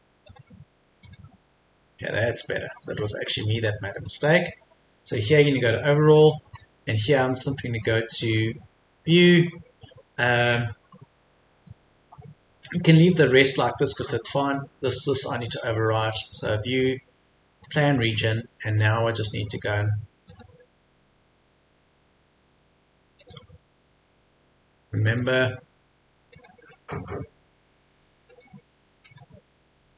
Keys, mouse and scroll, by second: 0.2 click, 1.4-2.6 scroll down 1, 2.6-3.4 scroll up 1, 3.4 click, 3.7-4.0 scroll down 1, 4.0 click, 6.2 scroll down 1, 6.4-7.0 scroll up 1, 9.2 click, 10.9-14.2 middle drag, 14.2-14.9 scroll up 1, 16.5 click.